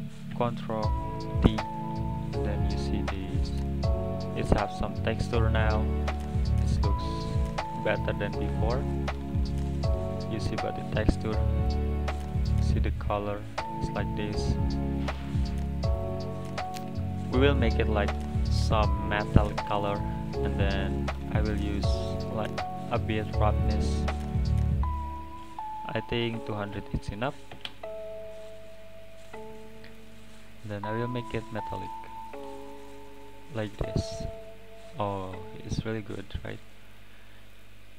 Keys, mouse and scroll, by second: 1.3 ctrl+t, 2.0 middle click, 2.5 scroll down 3, 2.9-3.8 drag, 4.8 click, 5.4 click, 6.6 middle click, 6.8-7.4 scroll up 3, 7.9 scroll down 1, 8.9 middle click, 9.6-10.6 scroll up 7, 10.6-11.6 scroll down 4, 11.6-15.5 middle drag, 15.9 click, 16.9 click, 18.0 middle click, 18.9-19.3 scroll up 5, 19.3-21.0 middle drag, 21.0-23.5 drag, 25.4-26.6 drag, 26.6 BackSpace, 30.7-33.7 drag, 36.1-36.6 scroll down 4, 36.6 middle click, 37.1-37.6 scroll up 4, 37.6 middle click.